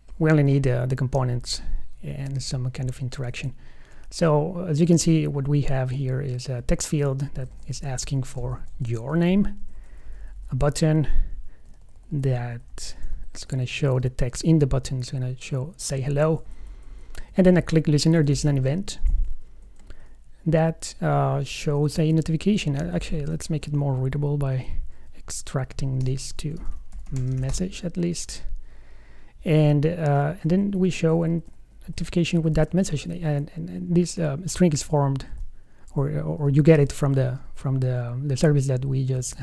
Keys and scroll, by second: 3.6 alt+Right, 7.7 super+Right, 8.6 alt+shift+Left, 10.0 alt+Left, 12.0 alt+Right, 13.3 alt+shift+Right, 16.4 alt+Left, 19.3 alt+Right, 22.8 shift+super+Right, 24.8 super+1, 30.7 alt+Right, 37.1 alt+shift+Right.